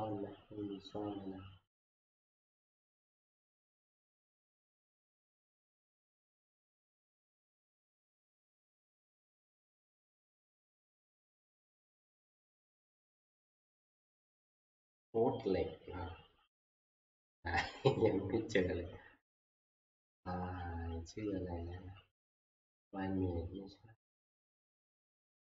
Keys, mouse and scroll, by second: 0.7-1.7 scroll, 3.4 click, 4.1-4.4 scroll, 13.3-14.8 scroll, 17.2-19.0 scroll, 19.9 scroll, 20.6 scroll, 24.5 click, 24.5-25.4 scroll.